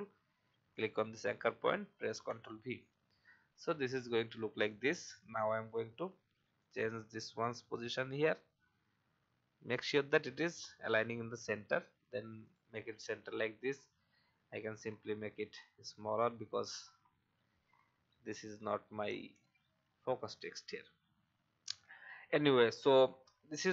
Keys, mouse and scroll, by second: 2.0 ctrl+v, 2.9-3.7 alt+scroll down 1, 4.5-13.5 drag, 14.0-14.3 shift+scroll down 1, 14.9-15.7 shift+scroll down 1, 16.4 shift+scroll down 1, 19.8 alt+scroll down 1, 20.5 click, 22.0 alt+scroll up 1.